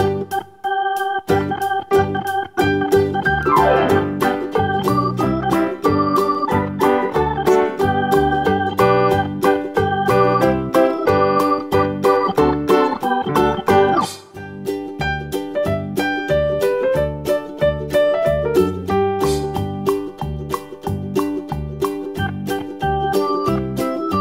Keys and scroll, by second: 13.4 BackSpace.